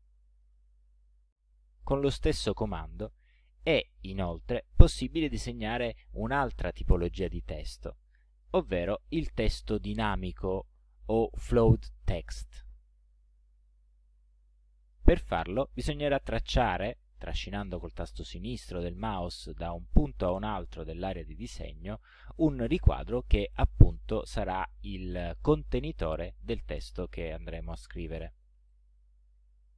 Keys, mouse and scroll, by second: 13.3-15.1 drag, 28.3-29.7 typing.